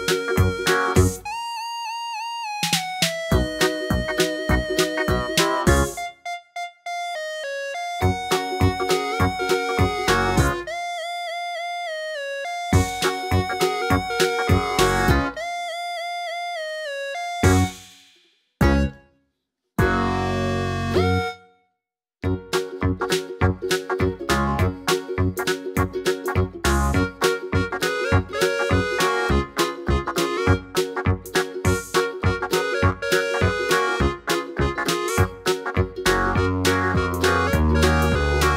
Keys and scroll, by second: 11.9 d, 32.4 Down, 32.6 Down.